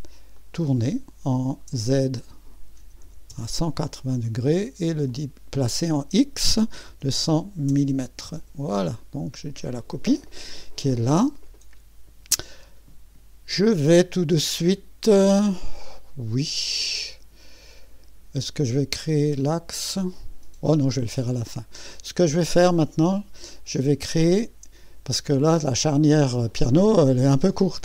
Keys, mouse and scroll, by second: 0.4 click, 1.7 click, 2.8-3.8 typing, 5.1-6.9 drag, 6.1-7.7 typing, 8.2 Return, 13.8-23.0 drag, 24.3 click.